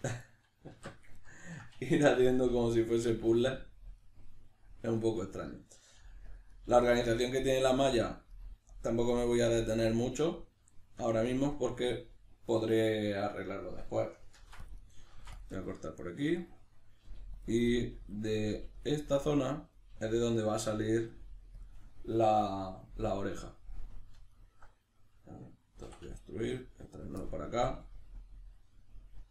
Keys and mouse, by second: 0.0 1, 0.2 right click, 0.8 alt+q, 1.2-2.8 ctrl+middle drag, 2.2 g, 2.8 click, 3.1 right click, 3.3 g, 4.0 click, 5.4 right click, 6.0 g, 6.4 click, 6.5 right click, 6.7 g, 7.2 click, 7.5 right click, 7.6 g, 8.1 click, 8.3 right click, 8.4 g, 8.8 click, 9.2 right click, 9.5 g, 9.8 click, 10.8-14.9 shift+middle drag, 14.4 ctrl+r, 14.9 right click, 15.2 ctrl+r, 15.6 right click, 16.4 right click, 17.0 g, 17.4 click, 17.7 right click, 17.8 g, 18.2 click, 18.4 right click, 18.5 g, 18.9 click, 19.3 right click, 19.7 right click, 19.9 g, 20.2 click, 20.8 right click, 21.0 g, 21.6 click, 24.3 alt+right click, 25.8 e, 27.0 click, 27.2-29.3 middle drag.